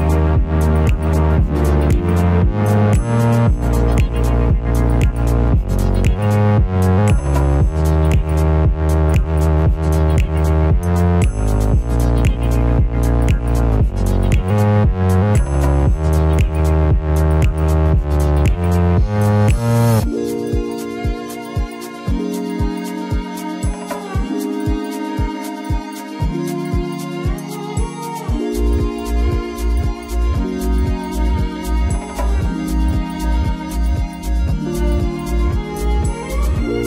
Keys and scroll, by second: 8.9 ctrl+z, 13.9 alt+t.